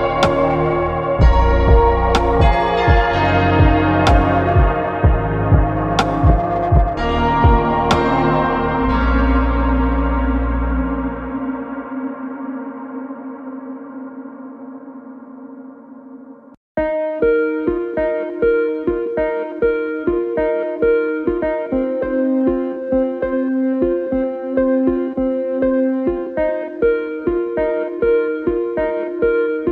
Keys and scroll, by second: 13.2 ctrl+alt+z, 15.8 ctrl+alt+z, 25.0 ctrl+alt+z.